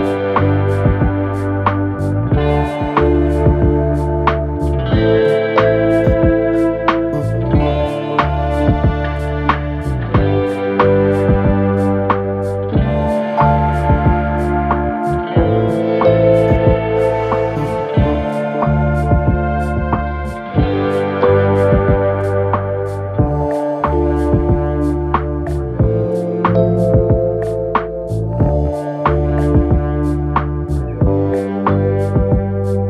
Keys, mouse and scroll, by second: 14.9 t, 17.6 typing, 19.3 typing, 24.3 v, 28.6 ctrl+0, 31.3 ctrl+-, 32.4 ctrl+=.